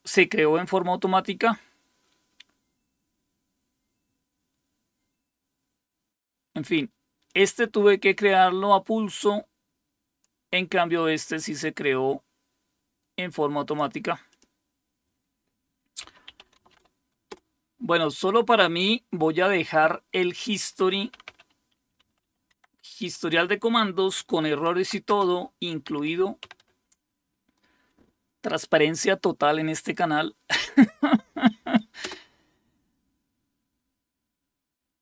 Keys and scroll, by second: 15.8-17.1 typing, 17.3 Return, 20.9-22.7 typing, 24.7-27.1 typing, 32.0 Return.